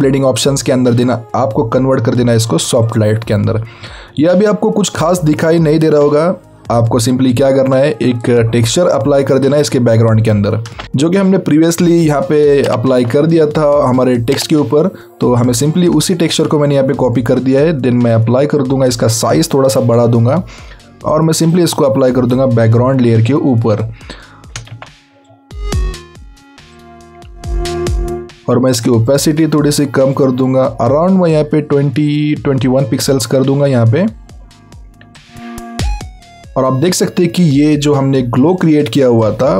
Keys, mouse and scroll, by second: 3.8 click, 4.7-7.3 alt+scroll up 2, 10.8 Tab, 12.3-13.0 alt+scroll down 1, 13.0-15.0 scroll down 1, 16.4 click, 21.4 click, 21.6 click, 27.9 click, 35.7 click, 38.6 click.